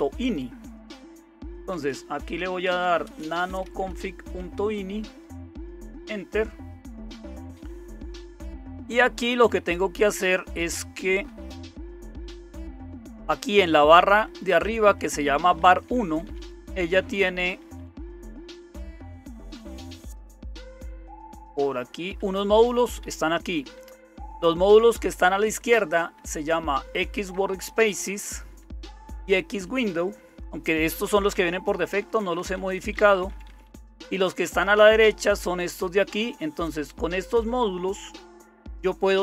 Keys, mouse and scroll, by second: 0.0-39.2 typing, 4.4 Tab, 5.9 Return, 8.9 Down, 9.1 Down, 9.3 Down, 9.4 Down, 9.6-11.0 Down, 11.5 Down, 11.9 Down, 12.1 Down, 12.3 Down, 12.5 Down, 12.6 Down, 12.8 Down, 13.7 Down, 13.7 Up, 13.9 Up, 14.1 Up, 14.2 Up, 14.4 Up, 14.6 Up, 15.4 Down, 15.4 Up, 15.6 Down, 15.9 Down, 16.1 Down, 16.3 Down, 22.2 Down, 22.4 Up, 22.5 Up, 23.0 Up, 23.8 Up, 23.9 Right, 24.1 Right, 24.3 Right, 24.4 Right, 24.6-31.3 Right, 31.3 Down, 31.3 Up, 32.3 Left, 32.5 Left, 32.7-33.5 Left, 34.4 Left, 34.6 Right, 34.8 Right, 35.3 Right, 35.9 Right.